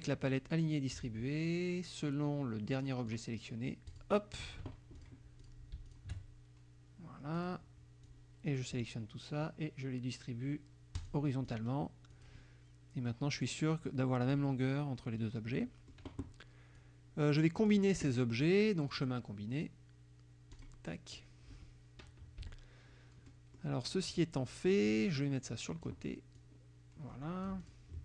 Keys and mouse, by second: 0.3 click, 1.5-3.3 drag, 3.9 click, 5.0 click, 5.5 click, 5.9 shift+click, 7.4 click, 8.1 click, 11.0 click, 11.5 click, 12.1 click, 13.4 click, 14.2 click, 15.6 middle click, 16.8 click, 18.9 click, 20.6 click, 22.4 -, 23.3 middle click, 23.9 click, 25.2 click, 26.4-27.9 drag.